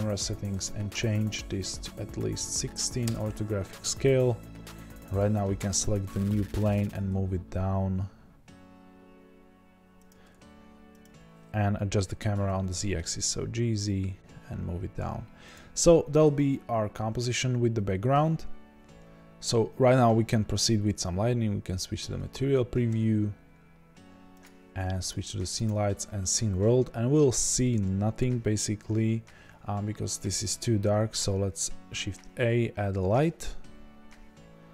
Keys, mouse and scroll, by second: 3.8-5.1 drag, 3.8-5.1 scroll down 1, 5.8 scroll down 1, 6.4-6.9 scroll up 2, 6.5-7.6 middle drag, 6.9 g, 11.0 click, 12.4 g, 15.9 click, 15.9-18.0 scroll up 1, 22.3 z, 24.3-34.7 drag, 29.9-30.4 scroll down 2, 30.4-32.4 scroll up 2.